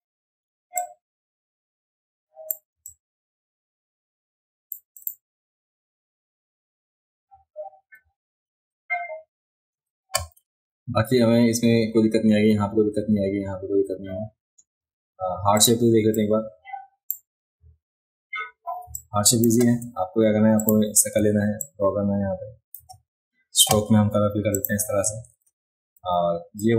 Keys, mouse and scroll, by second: 0.8-2.5 drag, 2.9-4.7 alt+drag, 5.0 alt+click, 15.6 click, 16.1-17.1 drag, 18.8 space, 19.0 click, 20.6 click, 21.6-22.8 shift+drag, 24.6 click, 26.0 a, 26.6-26.7 drag.